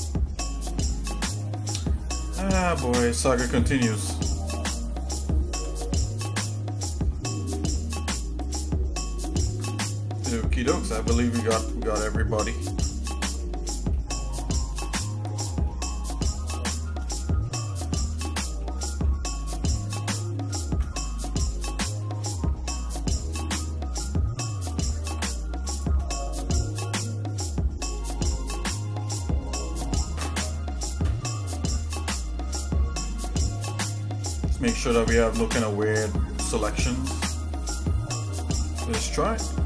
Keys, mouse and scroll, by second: 0.7 shift+middle click, 1.4 middle click, 2.1-2.9 scroll up 5, 3.3 click, 3.8 shift+click, 5.4 alt+m, 7.5 click, 8.5 click, 9.3 alt+shift+click, 9.8 middle click, 10.4 scroll down 1, 10.9 shift+middle click, 12.5 alt+shift+click, 13.4 shift+middle click, 13.9 shift+middle click, 15.0 middle click, 15.7 middle click, 16.1-16.6 scroll down 2, 16.6 shift+middle click, 17.1 middle click, 17.6 shift+middle click, 18.2 middle click, 18.8 middle click, 19.6 alt+shift+click, 20.6 alt+shift+click, 20.9 middle click, 21.5 shift+middle click, 22.2 middle click, 22.9-24.0 shift+middle drag, 24.7 alt+shift+click, 25.7 shift+click, 26.5 scroll down 1, 27.0-28.2 shift+middle drag, 28.7 middle click, 31.7 middle click, 32.0-32.9 scroll down 4, 33.0-34.8 shift+middle drag, 35.3-36.0 scroll down 2, 35.6-36.0 scroll up 1, 36.0 scroll down 1, 36.0-36.7 scroll up 4, 36.9 middle click, 37.4-38.1 scroll up 3, 38.6 middle click.